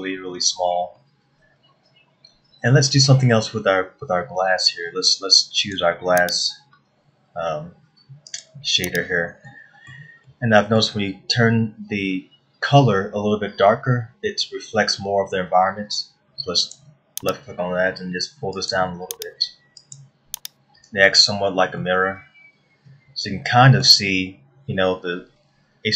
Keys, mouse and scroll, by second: 6.2 click, 8.9 click, 10.1 middle click, 10.9 middle click, 17.2 click, 22.0 scroll down 1, 22.4 middle click.